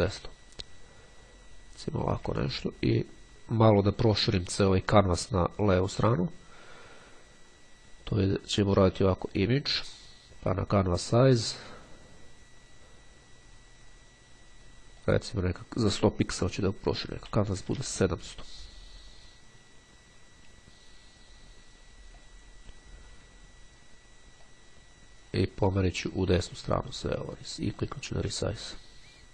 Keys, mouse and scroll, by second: 7.6-9.4 drag, 11.2 click, 15.1 click, 15.9 KP_7, 16.1 KP_0, 22.3 click, 24.3-27.4 drag, 27.8 click.